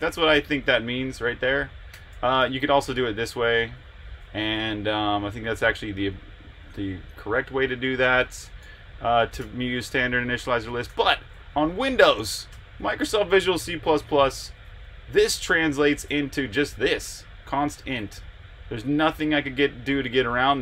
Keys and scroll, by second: 1.7-5.7 typing, 8.4 Escape, 8.6-9.4 typing, 10.6-11.3 typing, 12.5 Return, 14.4 Escape, 15.8-18.7 typing.